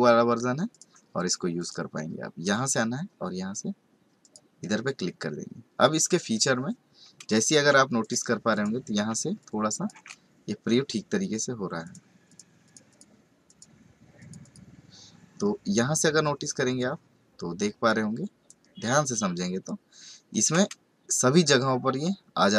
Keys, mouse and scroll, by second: 1.5 click, 4.2 click, 7.7 space, 8.0 click, 8.5 click, 11.8 click, 12.2 click, 12.6 click, 12.9 double click, 13.4 click, 14.2 click, 14.4 double click, 15.5-16.2 scroll up 1, 16.2-17.8 scroll down 2, 17.8 click.